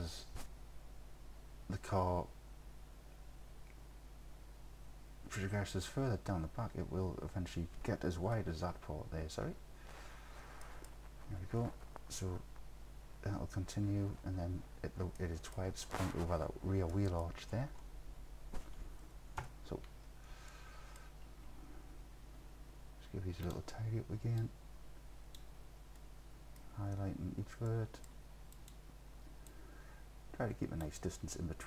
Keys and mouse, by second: 8.3 KP_7, 10.7 middle click, 15.2 click, 16.9 click, 19.4 KP_3, 20.6-21.0 drag, 23.5 click, 24.4 click, 26.1 click, 26.6-28.1 middle drag, 28.6 click, 29.6-30.9 drag.